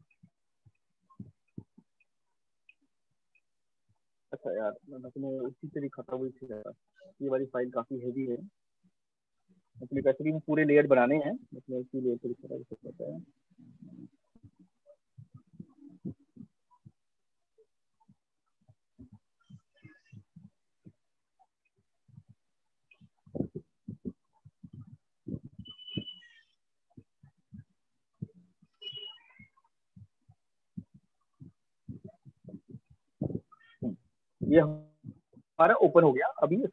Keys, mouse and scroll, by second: 4.0 Escape, 4.2 Escape, 4.4 Escape, 4.6 Escape, 4.8 Escape, 5.0 Escape, 5.4 Escape, 5.6 Escape, 5.8 Escape, 6.0 Escape, 6.2 Escape, 6.4 Escape, 6.6 Escape, 6.8 Escape, 7.0 Escape, 7.2 Escape, 7.4 Escape, 7.6 Escape, 7.8 Escape, 8.0 Escape, 8.2 Escape, 8.4 Escape, 8.6 Escape, 9.0 Escape, 9.2 Escape, 9.4 Escape, 9.6 Escape, 9.8 Escape, 10.1 Escape, 10.3 Escape, 10.5 Escape, 10.7 Escape, 10.9 Escape, 11.2 Escape, 11.4 Escape, 11.4 Escape, 11.6 Escape, 11.8 Escape, 12.0 Escape, 12.2 Escape, 12.6 Escape, 15.6 click, 17.2 click, 17.3 click, 34.8 click, 35.6 alt+click.